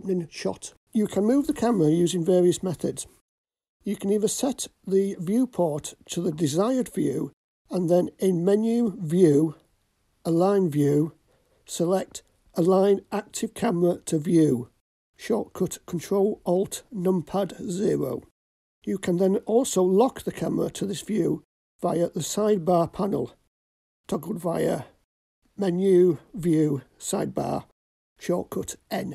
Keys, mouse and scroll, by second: 1.7-5.2 middle drag, 7.3 ctrl+alt+KP_0, 20.3 n, 21.2 click, 23.2 click.